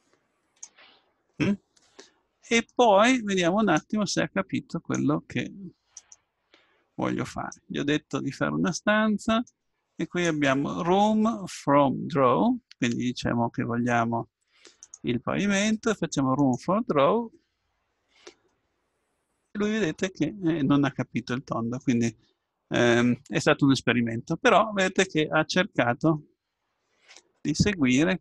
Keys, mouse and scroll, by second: 2.7-4.5 drag, 6.0-9.4 drag, 14.8-18.3 drag, 18.5-20.3 middle drag, 23.1-28.2 middle drag.